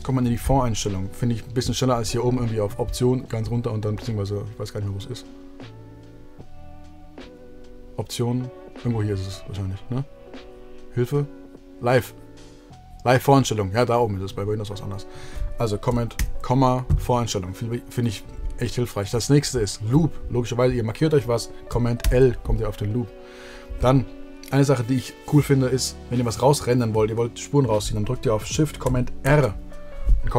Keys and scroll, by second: 16.1 super+,, 21.9 super+l, 29.2 shift+super+r.